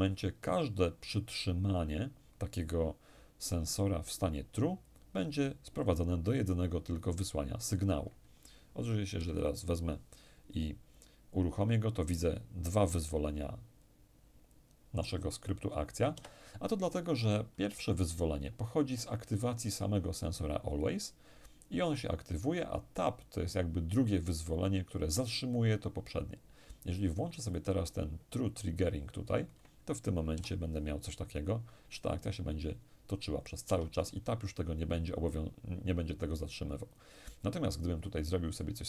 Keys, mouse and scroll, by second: 8.8 p, 15.8 Escape, 27.1 click, 30.0 p, 33.3 Escape, 36.5 click.